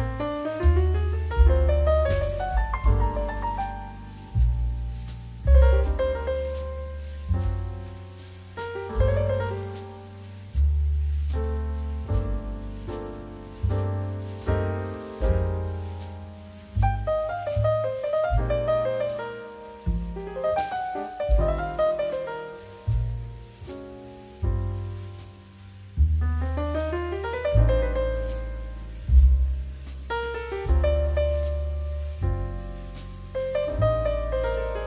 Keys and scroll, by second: 0.1 q, 1.3 space, 2.8 g, 7.0 z, 12.6 m, 14.1 n, 14.7 x, 15.7 m, 16.9 q, 18.7 space, 20.1 ctrl+shift+space, 23.9 f, 24.9 d, 29.0 Escape.